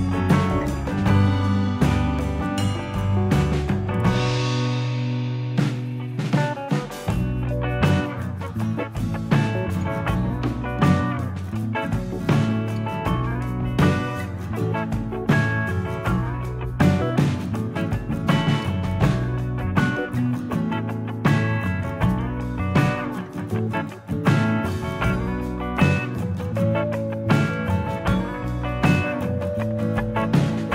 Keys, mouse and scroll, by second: 1.6 scroll down 3, 2.4 middle click, 3.8 scroll up 1, 4.0 z, 4.9-5.8 scroll up 3, 6.7 click, 7.4 scroll down 3, 7.7 middle click, 9.7 shift+middle click, 11.2 ctrl+KP_1, 12.0 shift+click, 13.6 shift+h, 14.7 shift+middle click, 15.3-15.6 scroll up 2, 15.8 shift+middle click, 18.9-19.5 scroll down 2, 19.5 scroll up 2, 20.3 z, 21.3-21.6 scroll up 3, 21.7 shift+middle click, 23.2-23.8 scroll down 7, 23.9 shift+middle click, 24.7-25.3 scroll up 1, 25.3 click, 26.8 click, 27.9 click, 28.9 scroll up 1, 29.3 shift+middle click, 30.4 shift+a.